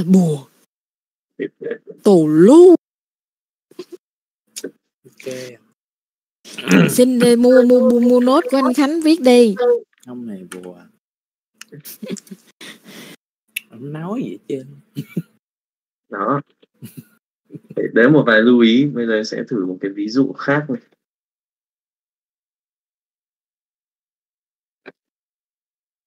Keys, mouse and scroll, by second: 3.7 click, 5.2 middle click, 7.4 middle click, 8.5 alt+a, 9.7 click, 10.1 middle click, 12.2 alt+a, 12.8 middle click, 13.6 click, 14.1 click, 14.7-16.0 middle drag, 16.2 middle click, 16.5 alt+a, 17.1-18.4 shift+middle drag, 22.6-24.5 drag.